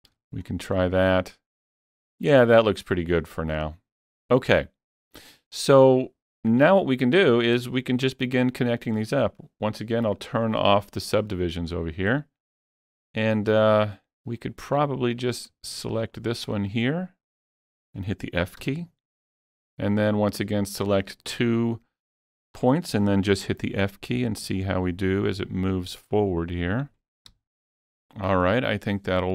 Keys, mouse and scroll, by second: 0.1 alt+a, 0.5-2.3 scroll down 1, 2.3 scroll down 1, 6.7 middle click, 6.7 scroll down 1, 7.5 scroll up 2, 10.1 click, 11.3-13.2 shift+middle drag, 12.7 scroll down 1, 13.2-16.1 middle drag, 14.4-14.9 scroll up 1, 15.2 click, 16.1 shift+click, 16.7 shift+click, 17.4 shift+click, 18.4 f, 18.8-20.8 middle drag, 20.3 click, 20.8 shift+click, 21.4 scroll down 2, 21.7 middle click, 22.3 shift+middle click, 22.5 scroll down 1, 23.4-25.7 typing, 27.3 f, 28.1-29.3 middle drag.